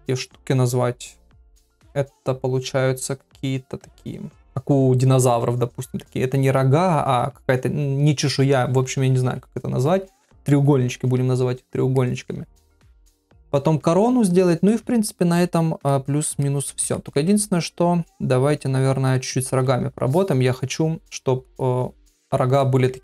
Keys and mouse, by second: 12.0 ctrl+middle click, 14.7 middle click, 15.9 middle click, 16.4 shift+middle click, 16.9 ctrl+middle click, 22.6 middle click.